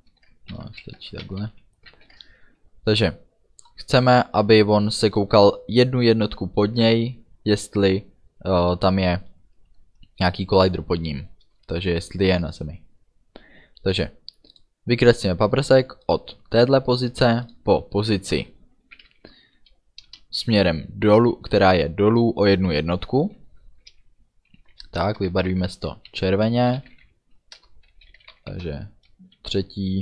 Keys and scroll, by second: 0.8 Left, 1.1 BackSpace, 1.6 End, 2.0 ctrl+s, 19.0 d, 20.1 Return, 24.8 space, 25.4 shift+c, 25.6 o, 26.7 l, 26.9 o, 27.0 r, 27.6 Return, 28.3 r, 28.7 Return.